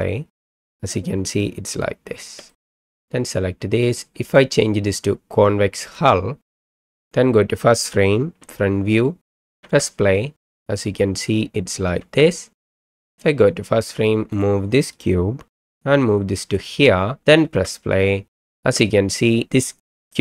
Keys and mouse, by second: 2.2 space, 2.6 middle click, 4.3-6.0 drag, 7.0 click, 8.4 KP_1, 9.6 space, 12.0 space, 13.0 click, 14.4 click, 15.5 g, 17.4 space, 18.5 space.